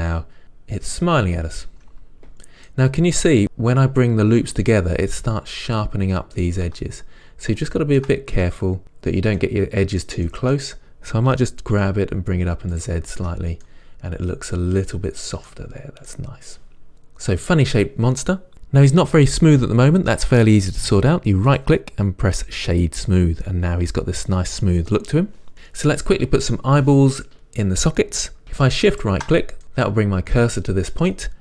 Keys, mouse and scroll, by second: 0.0-7.9 middle drag, 6.9 Tab, 7.4 scroll up 1, 8.2 middle click, 9.6-13.1 middle drag, 11.6 g, 13.1 click, 13.5 Tab, 13.5-23.1 middle drag, 15.9-16.3 scroll down 1, 23.1-29.6 right drag, 29.6-31.4 middle drag.